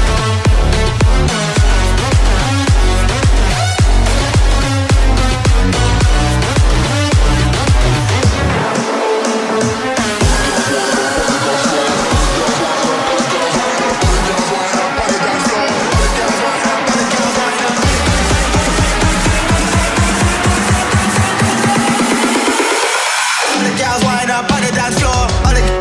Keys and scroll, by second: 5.6 ctrl+z, 11.5 space, 17.7 space, 23.4 space.